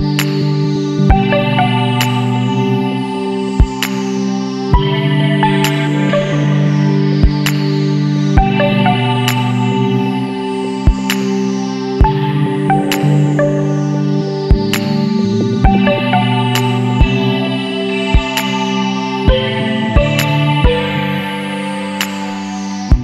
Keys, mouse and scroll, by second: 1.4 middle drag, 1.6-2.0 scroll up 1, 2.0-2.7 middle drag, 2.7-3.2 scroll up 2, 3.2-6.1 middle drag, 6.1 scroll down 2, 6.2-7.3 middle drag, 7.3 Tab, 8.4 Tab, 9.4 click, 10.8 Tab, 11.5 a, 13.1 click, 13.7-15.0 middle drag, 15.0 click, 19.9-21.5 middle drag, 21.5 Tab, 21.9 middle click, 22.2-23.0 scroll up 2.